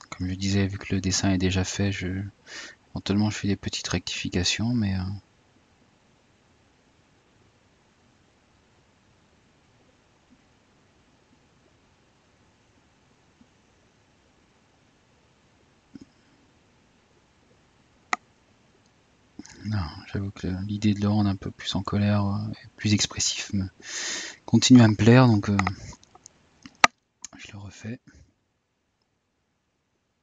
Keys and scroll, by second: 13.4 typing.